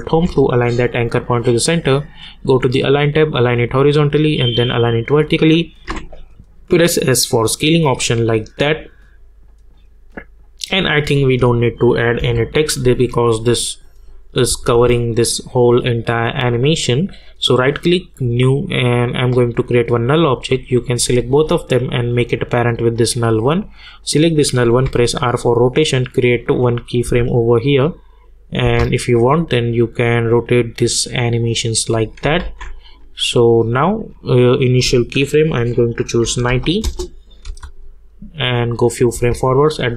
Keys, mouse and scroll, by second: 0.1 ctrl+alt+Home, 2.2 click, 5.8 s, 6.8 click, 8.0 -, 11.3 click, 14.5 space, 16.1 click, 17.2 right click, 18.2 click, 21.2-24.0 shift+drag, 24.8 r, 26.5 click, 27.0 space, 29.7-32.4 drag, 32.4 ctrl+z, 33.2-34.7 drag, 36.8 Return, 37.4 space.